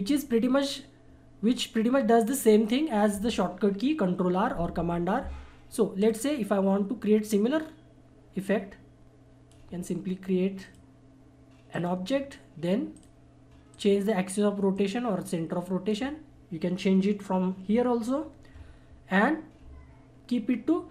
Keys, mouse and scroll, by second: 6.0-10.9 drag, 11.7 right click, 12.9-18.4 drag.